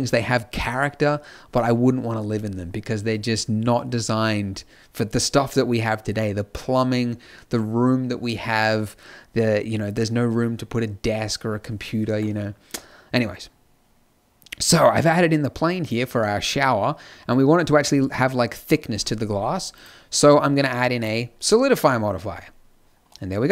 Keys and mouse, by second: 19.1 middle click, 23.0 middle click.